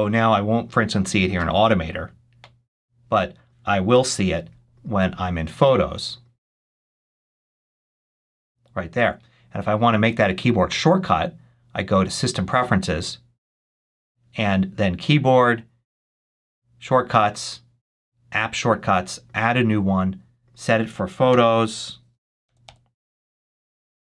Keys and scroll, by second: 3.8 super+h, 21.2 p, 22.3 Down, 23.2 Down, 23.6 Return.